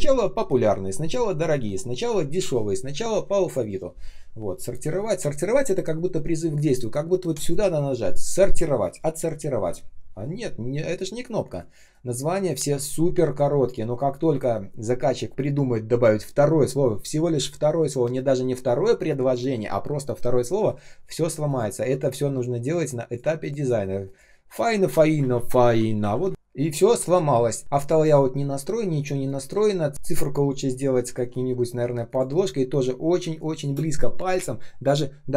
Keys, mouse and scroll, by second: 4.8 space, 11.3 space, 11.8 space, 12.2 space, 21.4 ctrl+click, 23.3 ctrl+click, 23.5 ctrl+click, 25.1-26.8 typing, 29.8 ctrl+click, 31.0 ctrl+я, 32.2 shift+0, 33.1 space, 33.6 space.